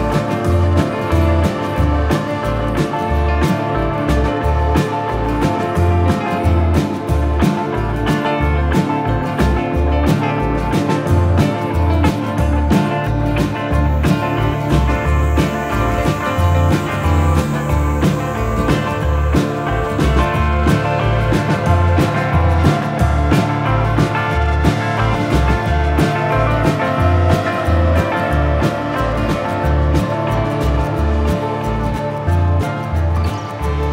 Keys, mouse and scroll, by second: 2.0 click, 3.0 middle click, 4.9-5.4 scroll up 2, 5.4-6.0 scroll down 1, 6.0 middle click, 6.0 scroll down 1, 9.0-9.6 scroll up 1, 9.6 middle click, 10.6 middle click, 16.2 click, 17.0-17.4 scroll down 2, 17.4 middle click, 23.6 right click, 24.8 click, 25.4 middle click, 26.0 right click, 26.6 shift+middle click, 27.1 middle click, 29.0 middle click, 30.4 shift+a.